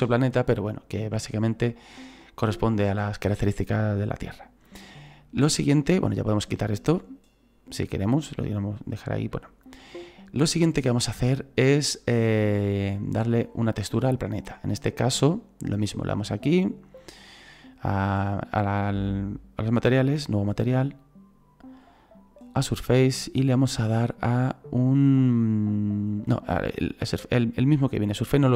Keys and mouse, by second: 7.9 click, 9.4 shift+middle click, 13.3 right click, 16.2 click, 20.3 click, 22.0 click.